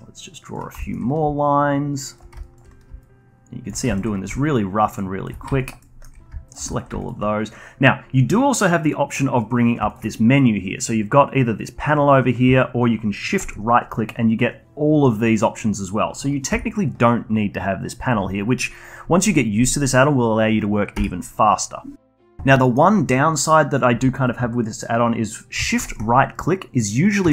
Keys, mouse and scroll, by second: 0.5 d, 0.8 alt+middle click, 1.2 d, 1.4-2.8 drag, 2.8 d, 3.0-4.2 drag, 4.2 d, 4.5 click, 5.2 d, 5.6 alt+click, 5.8 alt+middle click, 6.4 alt+shift+click, 6.7 alt+click, 7.0-9.4 shift+right drag, 9.9 shift+right click, 13.3-16.2 shift+right drag, 16.4 n, 20.9 n, 21.5-21.9 scroll down 1, 22.6 middle click, 25.8 shift+right click, 27.2 Tab.